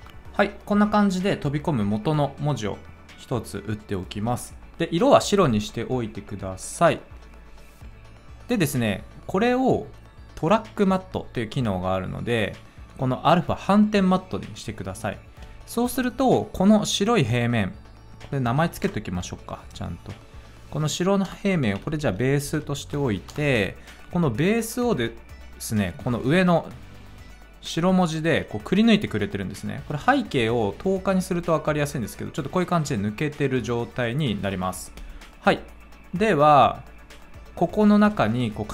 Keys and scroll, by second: 0.0-0.3 typing, 18.9 \, 21.3 Return, 21.5-23.1 typing, 23.3 Return.